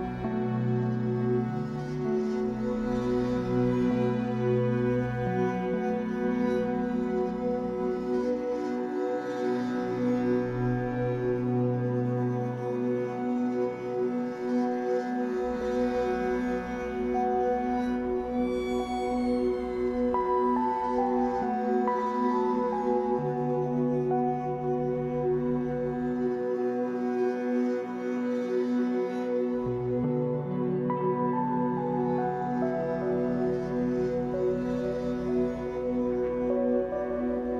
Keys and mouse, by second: 10.0-11.0 typing, 12.0 click, 13.3 ctrl+s, 15.6 click, 18.5 click, 22.0 alt+g, 27.6-28.4 typing, 28.0-28.4 drag, 29.6 typing, 31.6 alt+g, 33.5 i, 33.9-35.9 drag, 35.1-37.0 typing, 36.4 click.